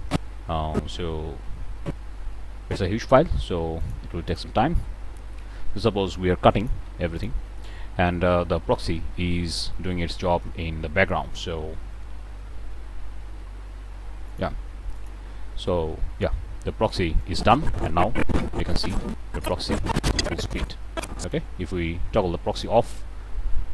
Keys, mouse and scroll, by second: 2.9-3.5 middle drag, 3.8 shift+click, 4.2 shift+click, 5.4 k, 6.6 click, 8.5 g, 14.3 click, 14.9 click, 15.3 scroll down 2, 16.2-16.5 middle drag, 17.2-21.5 drag.